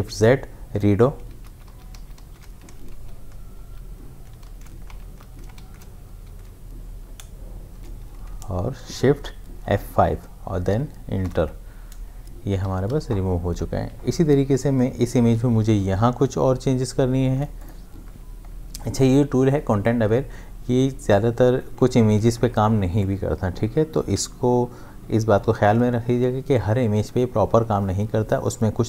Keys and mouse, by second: 1.5 ctrl+shift+z, 2.9 ctrl+z, 4.5 ctrl+shift+z, 5.0 ctrl+shift+z, 6.3 ctrl+z, 7.7 shift+F5, 11.2 Return, 12.7 ctrl+d, 12.9 v, 17.3 space, 17.6 ctrl+click.